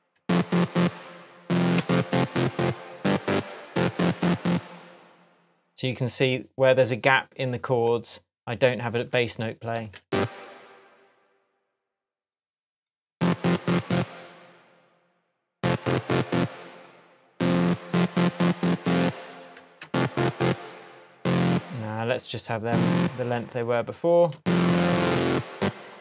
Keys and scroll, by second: 0.2 space, 3.4 space, 9.8 space, 13.1 space, 15.5 space, 17.8 space, 19.6 Delete, 24.3 space.